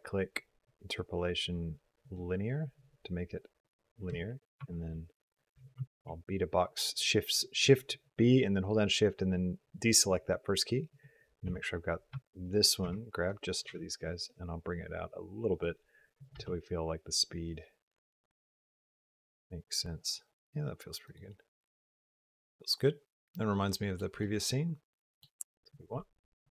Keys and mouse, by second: 4.0 g, 5.4 b, 5.8 shift+click, 10.8 click, 11.3 g, 12.3 click, 12.7 b, 13.5 g, 16.1 click, 16.3 space, 21.0 click, 21.7-23.8 middle drag, 24.0 middle click, 24.2 drag, 24.3-25.0 middle drag, 25.5 click, 25.9-26.3 middle drag.